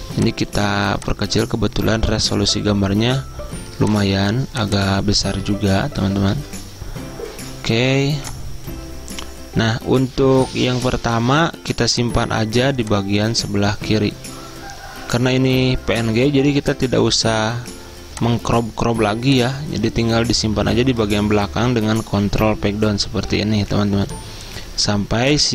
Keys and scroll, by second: 5.9-12.3 typing, 21.5 ctrl+Page_Down.